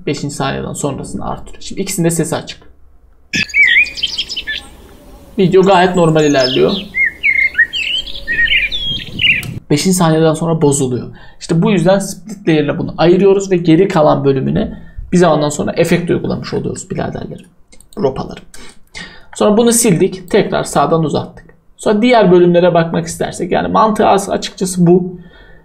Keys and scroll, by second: 19.2 Delete.